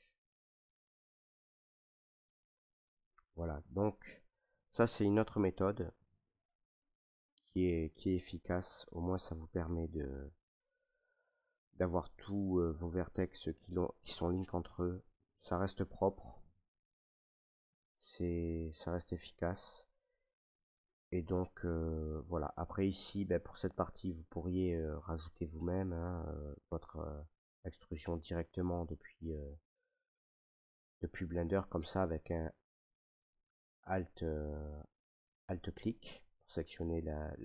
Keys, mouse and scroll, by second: 0.7 middle click, 0.9 middle click, 0.9 middle click, 1.1 middle click, 1.7 shift+middle click, 1.9 shift+middle click, 2.5 middle click, 2.7 middle click, 2.8 middle click, 3.2 middle click, 3.3 middle click, 4.0 middle click, 4.3 middle click, 4.5 scroll, 5.3 middle click, 5.8 shift+middle click, 6.0-6.4 scroll, 6.5 shift+middle click, 8.3-8.8 scroll, 10.0 shift+middle click, 11.1 middle click, 12.3 middle click, 13.7 shift+middle click, 15.2-15.6 scroll, 16.3 shift+middle click, 16.5 shift+middle click, 17.0 middle click, 17.1 middle click, 18.2 middle click, 18.5 middle click, 19.4 middle click, 19.5 middle click, 20.3 middle click, 20.6 middle click, 20.7 middle click, 21.2 Tab, 22.0 middle click, 23.1 right click, 24.2 shift+middle click, 24.3 shift+middle click, 24.4 middle click, 24.5 middle click, 24.8 shift+middle click, 25.7 shift+middle click, 27.1 shift+middle click, 28.4 middle click, 29.6 middle click, 29.9 middle click, 32.6 right click, 33.1 middle click, 33.2 middle click, 33.2 middle click, 34.7 middle click, 34.8 middle click, 35.9 alt+right click, 36.5 middle click.